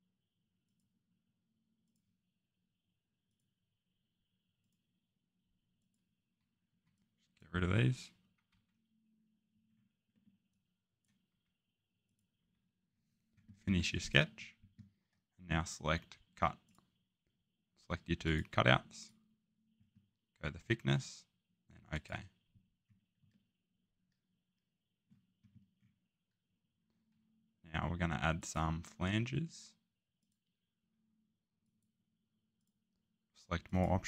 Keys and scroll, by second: 6.7 Escape, 8.5 Delete.